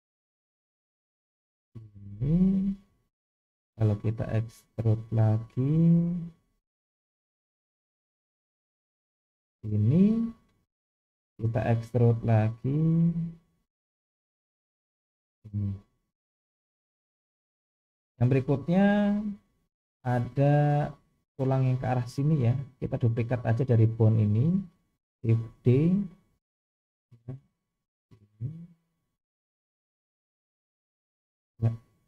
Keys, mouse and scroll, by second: 3.0 shift+middle click, 4.7-5.8 scroll down 1, 6.0 e, 10.6 shift+middle click, 12.2 e, 15.6-16.1 scroll down 3, 16.2 shift+middle click, 17.5-18.4 scroll up 3, 18.5 shift+middle click, 22.3 shift+middle click, 23.8 click, 25.6 shift+d, 31.7 scroll up 1.